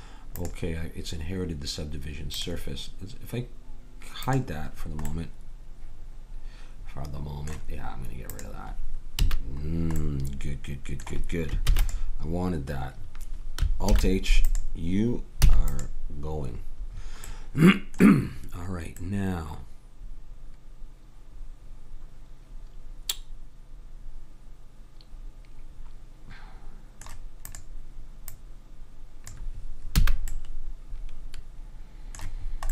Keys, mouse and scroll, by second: 0.4-2.2 drag, 2.4-6.1 drag, 4.9-7.0 middle drag, 4.9-6.1 right drag, 8.3-10.2 drag, 9.2 a, 10.2 middle click, 10.4 middle click, 11.7 ctrl+s, 13.9 alt+h, 14.5-15.8 drag, 15.4 x, 19.2-20.9 middle drag, 27.5-30.0 drag, 30.0 a, 30.3-31.5 middle drag, 31.8-32.7 middle drag.